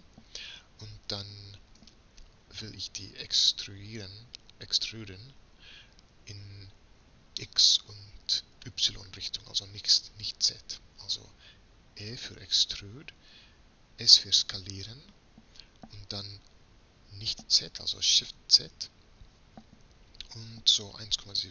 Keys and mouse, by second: 7.5-12.0 middle drag, 12.0 e.